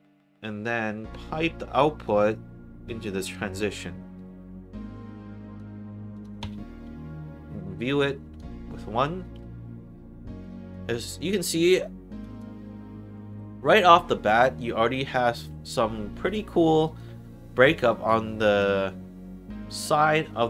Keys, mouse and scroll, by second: 0.7 middle click, 2.0-3.1 drag, 4.6 click, 6.1 click, 6.4 1, 7.9 click, 10.3 alt+right click, 10.8 alt+click, 11.3 alt+middle click, 12.1 alt+click, 12.5 alt+middle click, 13.1 alt+right click, 13.4 alt+middle click, 13.9 alt+right click, 15.6 alt+middle click, 16.0 alt+right click, 16.4 alt+middle click, 16.8 alt+right click, 17.8 right click, 18.3 alt+click.